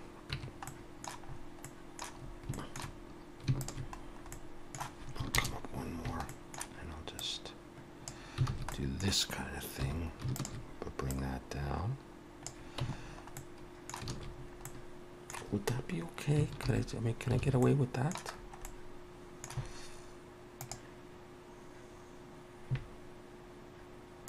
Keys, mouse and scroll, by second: 0.4 Tab, 0.7 middle click, 1.3-1.8 scroll up 3, 1.6 middle click, 2.2 scroll up 1, 2.6 shift+middle click, 3.6 alt+shift+click, 4.0-4.5 scroll down 2, 4.3 middle click, 5.3 ctrl+KP_Add, 5.9-6.3 scroll down 1, 6.3 middle click, 7.2 click, 8.5 alt+a, 8.7 middle click, 9.9 2, 10.4 alt+shift+click, 11.1 click, 12.8 Tab, 13.0-14.1 scroll down 3, 13.4 middle click, 14.1 alt+a, 14.4 scroll up 2, 14.7 middle click, 16.7 alt+h, 17.4 alt+a, 17.6 middle click, 18.4-18.8 scroll down 2, 18.7 middle click.